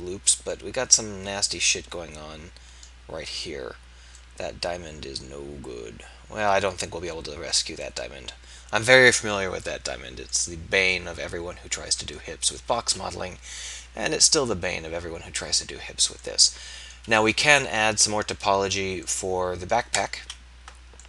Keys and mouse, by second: 13.8 KP_1, 17.6 KP_3, 20.1 KP_3.